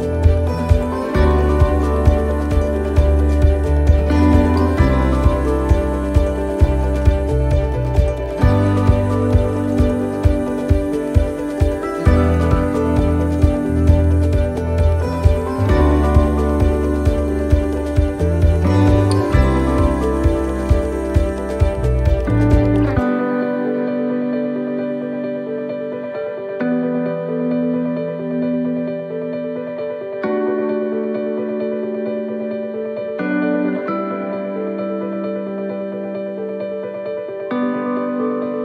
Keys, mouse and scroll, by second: 1.3 shift+middle click, 2.4 click, 3.5 right click, 5.0 click, 7.1 click, 11.1 click, 11.8 right click, 12.7 click, 14.1 right click, 15.1 right click, 15.5 right click, 16.6 l, 17.5 middle click, 18.9 middle click, 19.8 middle click, 20.8 ctrl+z, 21.7 ctrl+z, 22.0 ctrl+z, 24.3 ctrl+z, 27.0 ctrl+z, 30.8 ctrl+z, 30.8 middle click, 31.4 middle click, 32.5-32.9 scroll up 4, 33.9 click, 35.0-35.4 scroll down 4, 35.4 middle click, 35.9 shift+middle click, 36.6 scroll down 1, 36.9 middle click.